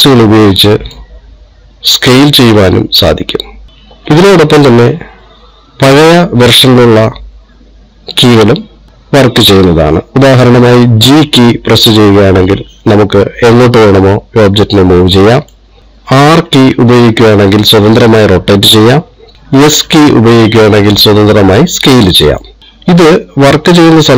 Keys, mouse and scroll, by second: 2.7 click, 11.4 g, 16.8 r, 20.2 s.